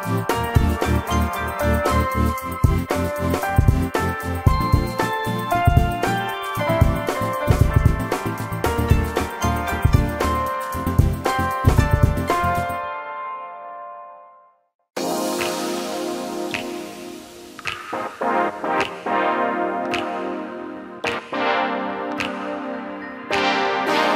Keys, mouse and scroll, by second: 3.8 ctrl+click, 4.3 space, 8.6 space, 9.2 e, 10.0 space, 11.4 m, 14.7 shift+scroll down 1, 15.4 shift+click, 15.7 shift+scroll down 1, 16.0 shift+middle click, 18.1 alt+t.